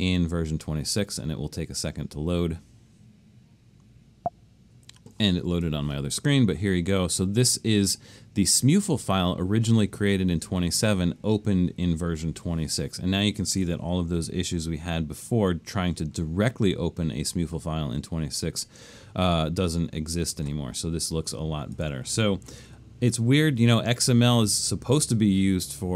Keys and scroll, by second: 13.8 super+=, 14.4 super+=, 22.7 super+-, 23.6 super+-.